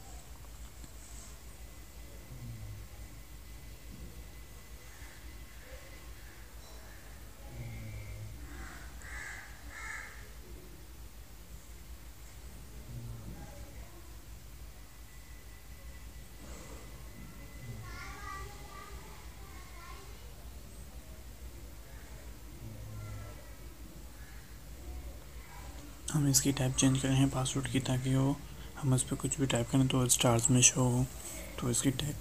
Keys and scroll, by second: 11.1 ctrl+BackSpace, 18.8 ctrl+c, 20.7 ctrl+v, 30.5 ctrl+c, 31.9 ctrl+v.